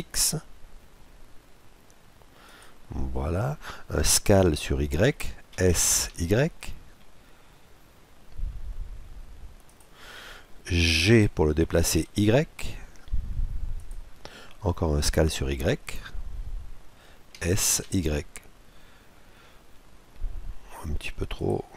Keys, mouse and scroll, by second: 5.6 s, 11.1 g, 17.4 middle click, 17.4 s.